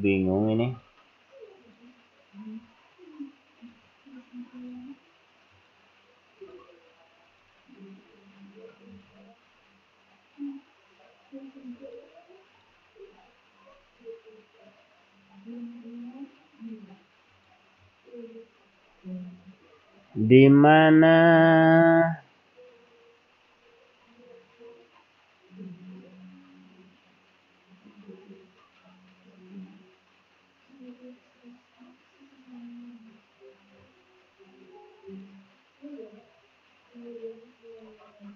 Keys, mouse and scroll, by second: 1.2 click, 1.7 click, 3.8 click, 4.6 click, 6.4 click, 8.9 click, 9.6-10.5 scroll down 6, 11.8 click, 12.5 click, 13.1-13.4 scroll down 2, 13.7-14.9 scroll up 2, 17.3 click, 24.1 right click, 35.1 right click, 37.7 click.